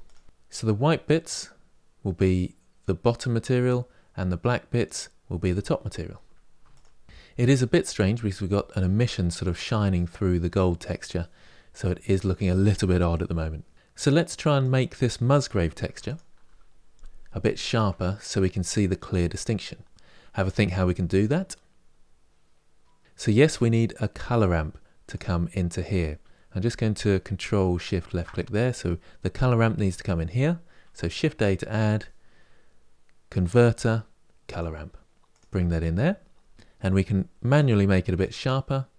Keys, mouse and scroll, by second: 6.4 ctrl+shift+click, 14.2 click, 15.8 ctrl+shift+click, 24.1 click, 27.5 ctrl+shift+click, 36.2 scroll up 5, 36.3-37.3 middle drag, 37.3-38.9 drag.